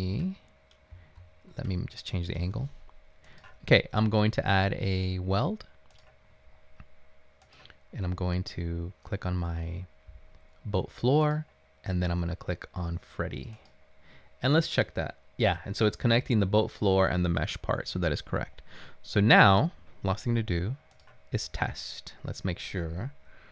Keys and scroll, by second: 0.0-0.9 typing, 5.3 typing.